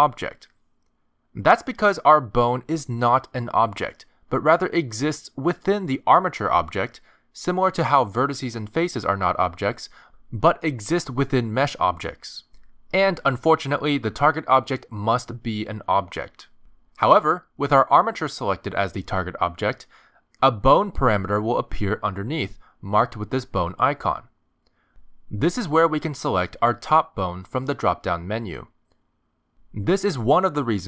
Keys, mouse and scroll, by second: 0.7 click, 1.9 r, 3.4 click, 7.5 click, 8.2 Tab, 9.2 g, 11.1 Tab, 11.7 click, 12.0 r, 14.0 ctrl+Tab, 14.3 click, 27.4 click.